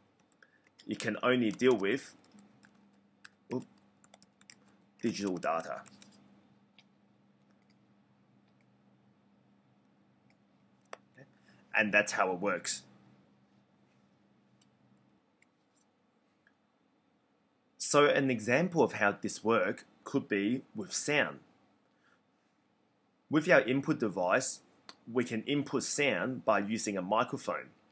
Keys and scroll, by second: 0.0-0.1 typing, 1.3-6.2 typing.